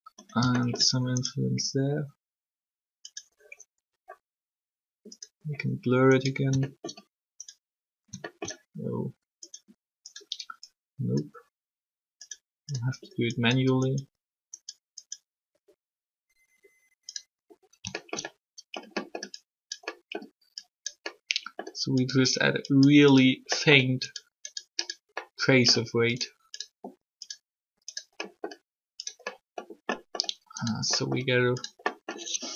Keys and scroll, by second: 1.4 alt+shift+r.